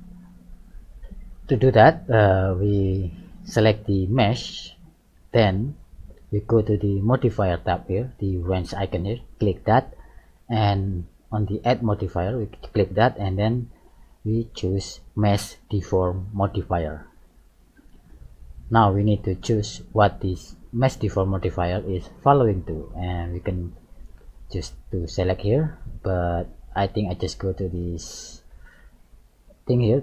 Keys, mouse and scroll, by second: 2.3 middle click, 4.2 right click, 4.8 middle click, 9.2 click, 12.6 click, 18.6 middle click, 24.5 click.